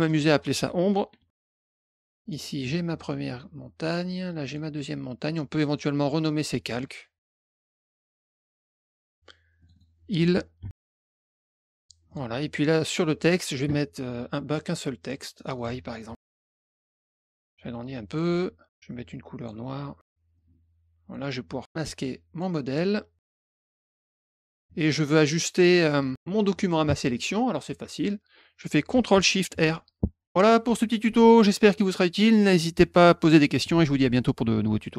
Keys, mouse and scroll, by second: 0.0 click, 0.7-1.8 typing, 1.7 click, 1.8 click, 2.0 click, 2.2 click, 3.8 click, 4.4 click, 5.6 click, 6.1 click, 6.2 click, 6.9-8.3 typing, 8.1 click, 8.9 click, 9.0 click, 9.5 click, 9.7 click, 10.3-11.1 typing, 11.2 click, 12.0 click, 13.2 click, 15.0 click, 15.5 click, 16.1-17.2 typing, 17.5 ctrl+shift+click, 19.3 click, 20.3 click, 22.3 click, 23.4 ctrl+shift+click, 23.6 click, 24.0 click, 24.2 click, 29.9 ctrl+shift+r.